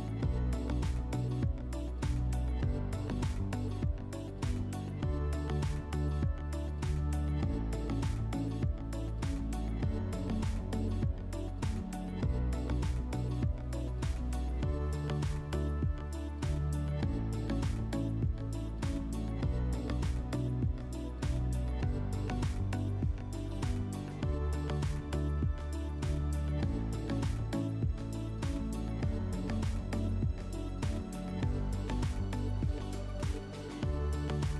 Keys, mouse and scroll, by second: 1.5-2.9 drag, 4.8 click, 7.0 click, 8.8-10.3 drag, 13.1 click, 15.8 click, 18.3 click, 20.1 click, 21.2 right click, 22.6 click, 32.6 click, 33.9 scroll.